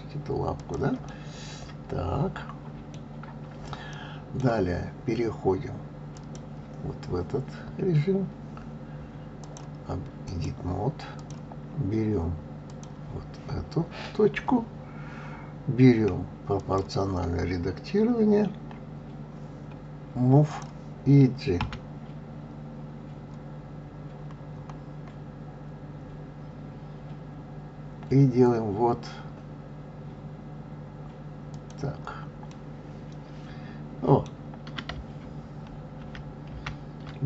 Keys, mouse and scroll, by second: 1.1-6.1 middle drag, 6.1 click, 9.4-11.3 drag, 12.7 click, 16.6-19.6 drag, 20.4-21.6 drag, 21.6 g, 32.4 scroll up 1, 32.5-35.4 middle drag.